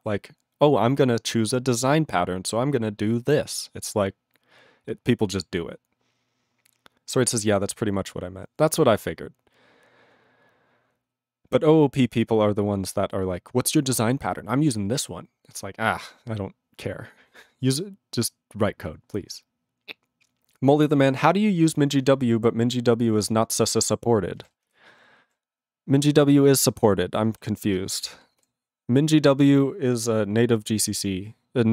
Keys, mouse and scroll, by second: 24.4 q, 26.9 q, 27.5 ctrl+s.